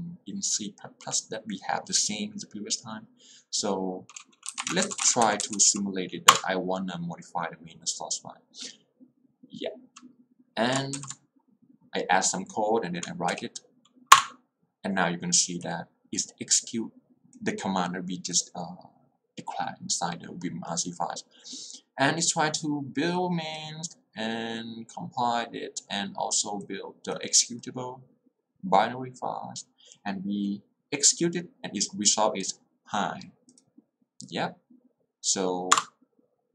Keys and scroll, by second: 4.4-6.1 typing, 6.5 Return, 13.4 w, 14.2 Return, 35.8 Return.